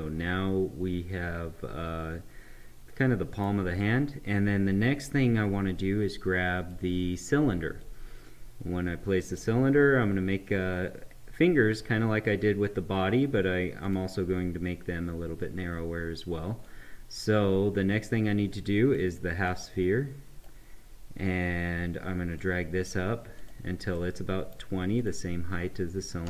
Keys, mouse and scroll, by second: 5.1-12.1 drag, 13.8 click, 16.6-23.4 drag, 23.9 right click, 24.9 click.